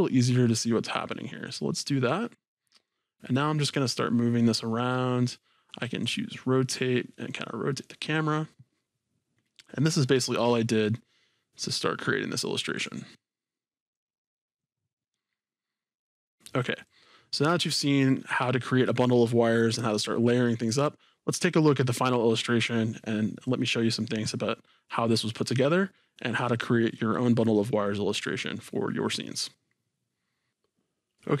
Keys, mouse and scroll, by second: 0.0-6.2 drag, 7.3-10.9 drag, 10.9-12.8 middle drag, 12.8 click, 14.0-31.4 drag.